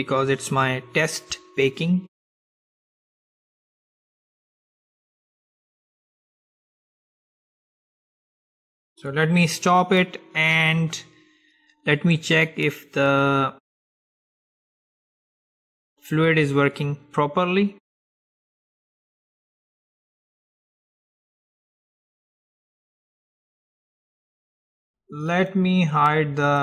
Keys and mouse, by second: 8.1-10.4 drag, 12.6-14.7 drag, 23.1-25.4 middle drag, 25.4-26.6 drag.